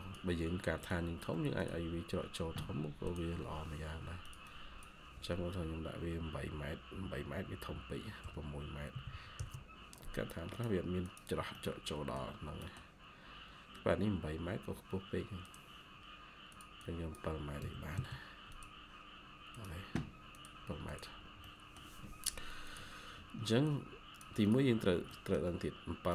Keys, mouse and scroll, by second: 4.3 double click, 8.1-8.8 typing, 9.3 Return, 11.4 middle click, 12.2 scroll down 1, 12.5 middle click, 13.6-14.7 scroll up 1, 16.7 double click, 17.5-17.9 typing, 21.1 scroll down 1, 21.3 middle click, 21.9-24.0 scroll up 1, 24.6-25.0 scroll down 1, 25.0 middle click.